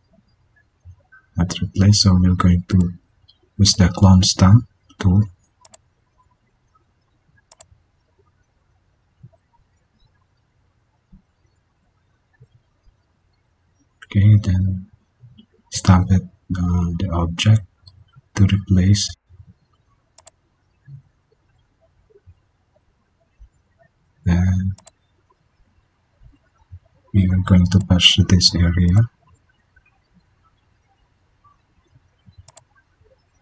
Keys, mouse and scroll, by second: 4.2 click, 4.4 alt+click, 7.1 ctrl+d.